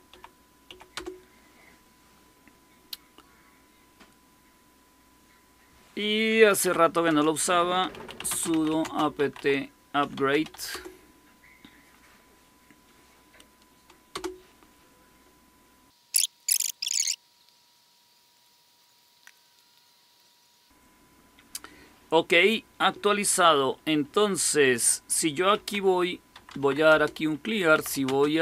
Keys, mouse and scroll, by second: 0.0-0.9 typing, 6.5-10.9 typing, 14.0 Return, 25.2-28.4 typing.